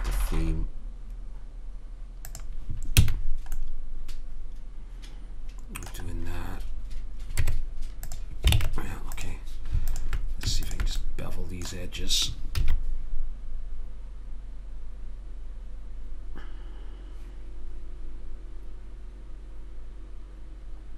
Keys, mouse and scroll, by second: 3.0 a, 7.4 Tab, 8.6 ctrl+Tab, 11.4 click, 12.6 ctrl+b.